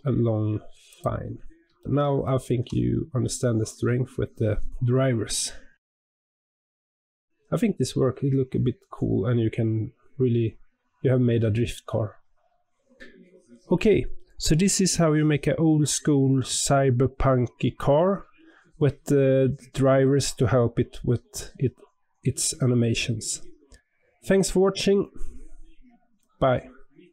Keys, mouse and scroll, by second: 1.1 scroll up 3, 1.7-4.7 shift+middle drag.